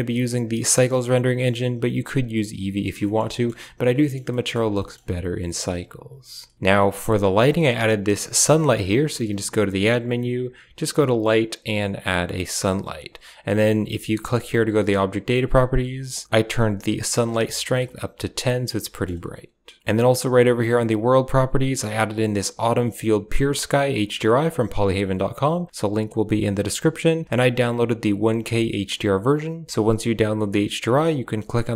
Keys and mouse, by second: 3.0 shift+middle click, 3.3 middle click, 4.0 shift+middle click, 4.3 middle click, 4.7 shift+middle drag, 5.4 shift+middle click, 7.1 right click, 7.4 g, 8.1 r, 9.0 shift+a, 14.5 click, 15.1 click, 16.0 click, 16.2 click, 18.3-18.9 middle drag, 19.6 KP_0, 20.7 click, 21.4 click, 27.0-29.3 drag.